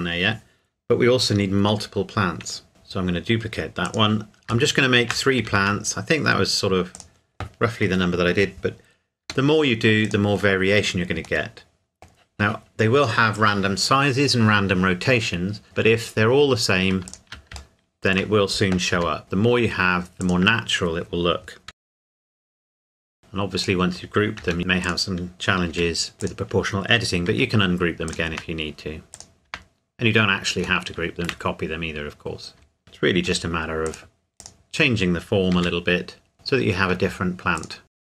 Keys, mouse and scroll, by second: 2.7 shift+d, 3.8 click, 4.7 shift+middle click, 5.5 shift+d, 6.9 click, 9.2 g, 10.0 click, 11.4 middle click, 17.0 Tab, 17.3 alt+click, 17.8 shift+middle click, 18.9 g, 19.2-20.2 scroll up 1, 20.2 click, 21.7 s, 21.8 click, 22.2 shift+click, 22.7 ctrl+KP_Add, 22.9 s, 23.0 click, 24.4 g, 24.8 click, 25.7 r, 26.1 click, 27.3 r, 28.1 click, 28.3 Tab, 29.2 click, 29.5 Tab, 30.8 shift+middle click, 32.8 click, 33.3 g, 33.8 click, 35.6 r, 36.3 click, 37.6 alt+click, 37.9 alt+shift+click, 38.1-38.2 typing.